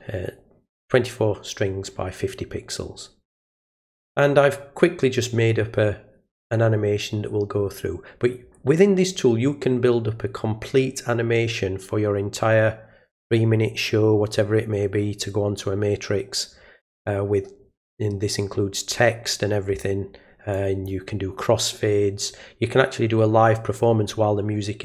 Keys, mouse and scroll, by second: 3.7 click, 20.5 click.